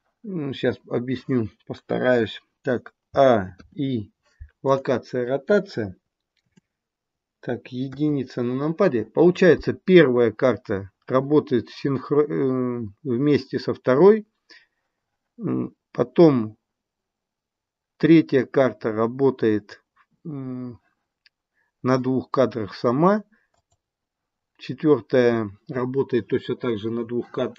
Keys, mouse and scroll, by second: 3.0 a, 3.6 i, 6.2 KP_7, 7.8 KP_1, 23.4 click.